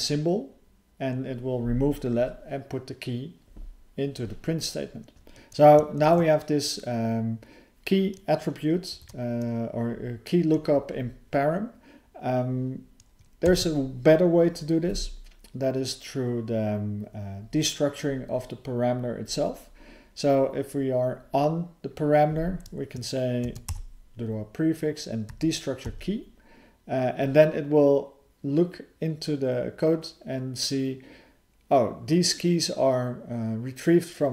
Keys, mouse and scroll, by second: 5.3 ctrl+_, 5.3 alt+f, 5.3 BackSpace, 8.9 alt+f.